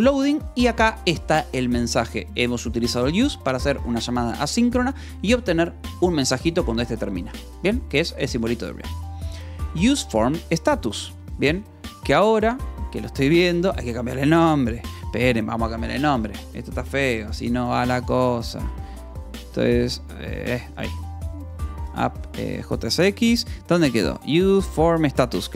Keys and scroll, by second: 17.1 w, 17.7 space, 18.5 Escape, 18.8-22.7 typing, 19.8 Escape, 24.8 k.